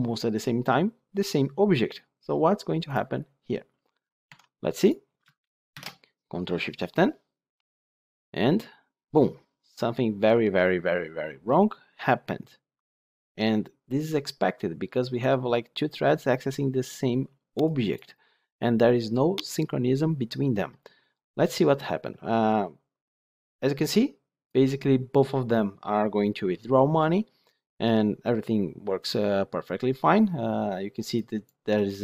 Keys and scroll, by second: 5.7 ctrl+shift+F10.